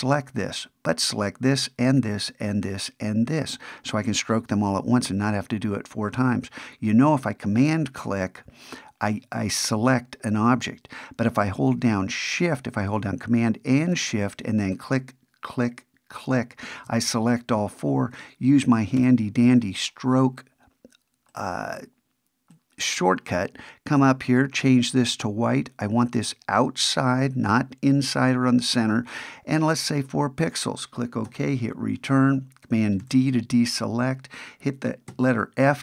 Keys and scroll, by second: 19.0 ctrl+alt+super+s, 33.0 super+d.